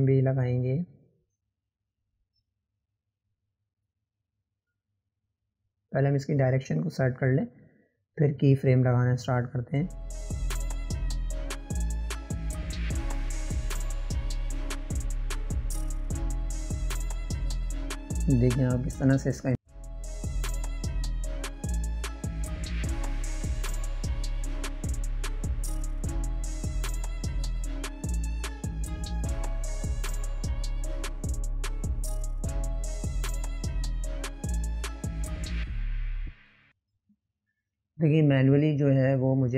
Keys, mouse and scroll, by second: 0.0 scroll down 2, 0.5-2.4 shift+middle drag, 2.4 click, 5.1 click, 6.8 click, 7.5 scroll down 1, 7.9-9.0 shift+middle drag, 9.0 click, 12.1 click, 12.6 click, 13.2 click, 22.1-27.0 drag, 27.0-27.9 right drag, 27.9-30.2 drag, 36.4-39.5 middle drag.